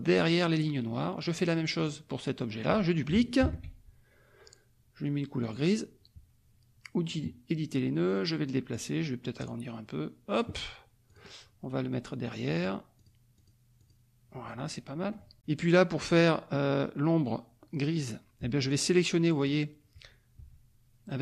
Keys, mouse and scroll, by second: 1.0 click, 1.7 click, 3.4 ctrl+d, 5.4 click, 7.0 click, 8.0 click, 9.3-10.5 drag, 11.0 click, 12.5 click, 12.9 click, 13.3 click, 13.8 click, 14.6 click, 18.4 F2, 18.6 click, 20.3 F1.